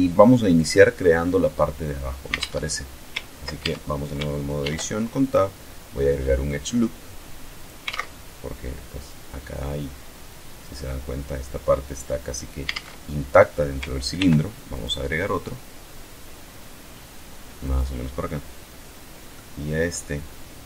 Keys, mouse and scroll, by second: 0.0 alt+scroll up 1, 0.3-0.9 scroll down 1, 2.1 alt+Tab, 3.2 ctrl+Tab, 4.2 ctrl+r, 4.9 ctrl+click, 7.2 alt+click, 7.5 alt+Tab, 12.4 alt+Tab, 13.8 ctrl+r, 14.3 ctrl+click, 17.2 click, 19.0-19.7 middle drag.